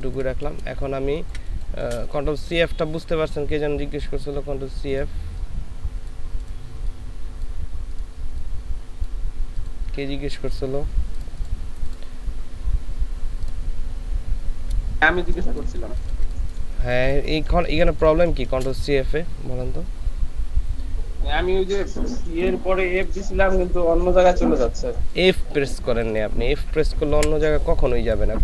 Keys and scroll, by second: 1.1 space, 15.2 ctrl+space, 16.8 ctrl+space, 17.5 ctrl+space, 27.2 Delete.